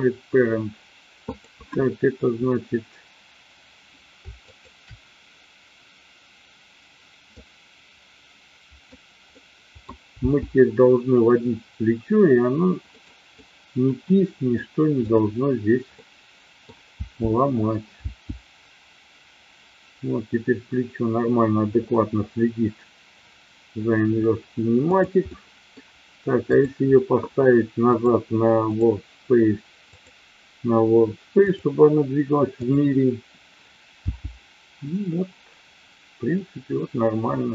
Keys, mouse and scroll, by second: 1.3 click, 4.4 shift+click, 7.3-8.9 drag, 9.3-9.8 middle drag, 10.1 g, 12.9 middle click, 13.3 scroll up 1, 13.4-14.6 middle drag, 15.0 click, 16.0-16.6 middle drag, 17.0 g, 17.9 g, 24.9 click, 25.3-25.8 middle drag, 26.4-26.8 drag, 28.0-28.9 drag, 30.0-31.6 drag, 32.5 click, 34.0 g.